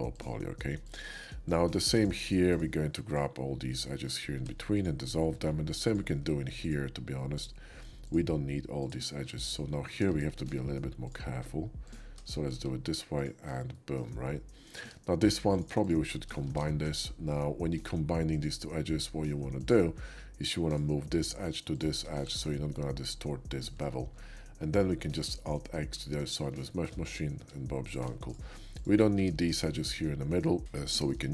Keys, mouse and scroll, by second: 0.1 alt+click, 0.8-2.0 alt+shift+drag, 2.5 alt+shift+click, 3.1-4.3 alt+shift+drag, 4.3 x, 4.7 click, 5.9 alt+click, 6.5 alt+shift+click, 7.4-9.8 alt+shift+drag, 10.1 ctrl+z, 10.6 shift+middle click, 11.1 shift+click, 11.9 click, 12.5 x, 13.2 click, 13.7 shift+middle click, 14.5 shift+middle click, 14.8 Tab, 15.4 click, 15.8 shift+click, 16.3 z, 18.0 shift+z, 19.6 click, 20.6 click, 21.7 shift+click, 22.2 1, 23.4 middle click, 24.2 middle click, 25.2 alt+x, 26.1 middle click, 26.7 shift+middle click, 27.3 Tab, 27.9 click, 28.3 shift+click, 29.1 x, 29.4 click, 30.0 middle click, 30.9 middle click, 31.2 shift+middle click.